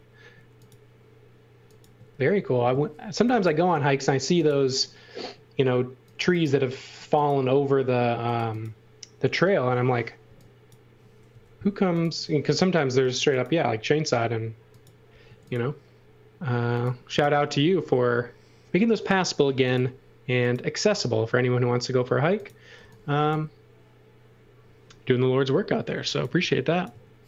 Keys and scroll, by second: 1.9 space, 3.2 e, 3.7 a, 10.2 e, 11.3 l, 15.3 a, 22.8 e, 25.7-26.9 typing.